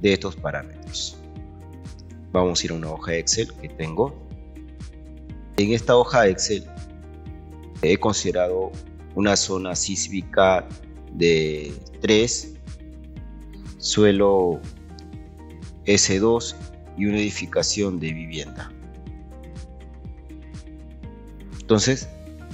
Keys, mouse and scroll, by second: 2.5 Escape, 9.6 click.